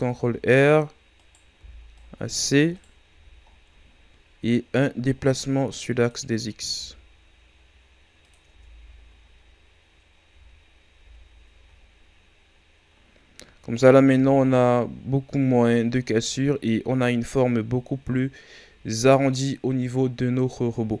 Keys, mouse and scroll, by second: 0.0 z, 1.1 right click, 1.5 c, 3.0 z, 3.4-4.0 scroll down 7, 5.2-6.7 drag, 6.7 g, 8.4 Tab, 9.0-9.4 scroll down 5, 10.2 a, 10.9 Tab, 11.5 a, 11.9-12.7 scroll down 2, 12.7-13.1 scroll up 4, 13.6 ctrl+scroll up 2, 14.1 Tab, 14.6 scroll down 2, 17.7-19.4 scroll down 4, 19.4-20.1 scroll up 2.